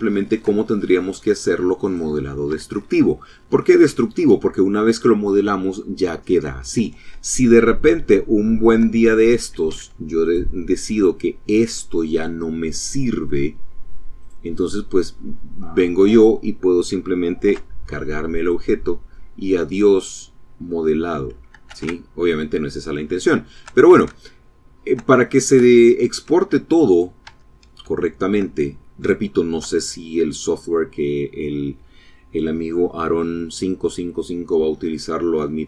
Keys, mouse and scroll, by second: 0.8 click, 1.5 Tab, 6.9 shift+click, 8.7 Tab, 9.2 click, 9.9 click, 13.2 click, 16.4 x, 17.4 click, 18.1-20.3 drag, 20.8 ctrl+z, 21.4 click, 22.2 shift+click, 23.2 shift+click, 24.2 shift+click, 24.6 shift+middle click, 24.8 shift+click, 24.8 shift+middle click, 25.9 click, 26.3 Tab, 27.0 shift+click, 27.6 shift+click, 28.2 shift+click, 28.8 shift+click.